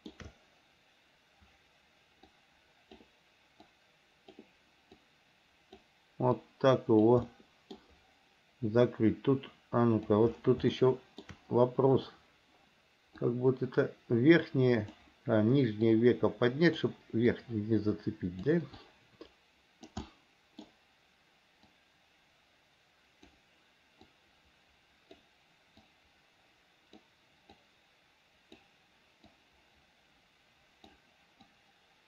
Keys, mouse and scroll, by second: 2.5 click, 3.8 click, 5.2 click, 6.6 click, 7.5 middle click, 9.1-10.3 drag, 10.9 shift+middle click, 13.5-15.2 drag, 16.1 click, 17.5-18.7 drag, 19.0-20.1 drag, 20.3 middle click, 21.9-23.5 drag, 24.3-25.4 drag, 26.1-27.2 drag, 27.8 click, 29.5-31.1 drag, 31.7-32.0 drag.